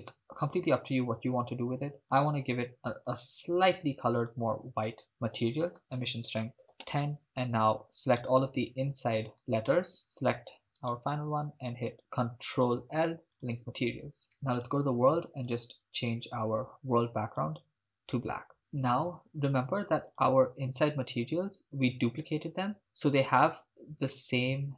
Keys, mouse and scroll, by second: 0.5-1.5 scroll down 1, 1.5 click, 1.5 scroll up 1, 5.5-7.0 drag, 8.4 right click, 9.3 shift+right click, 10.0 shift+right click, 11.0 shift+right click, 11.9 ctrl+l, 14.6 click, 15.5 click, 20.1 click.